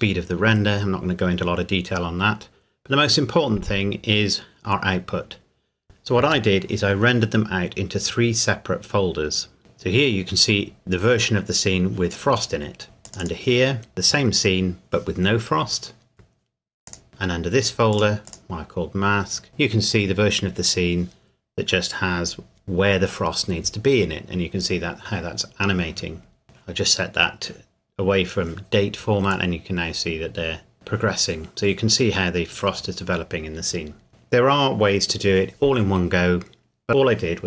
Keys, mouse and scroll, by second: 0.5-3.8 scroll up 1, 3.8-4.4 scroll down 1, 13.0 click, 16.9 click, 26.4 click, 29.3-30.7 drag, 32.1 scroll down 1.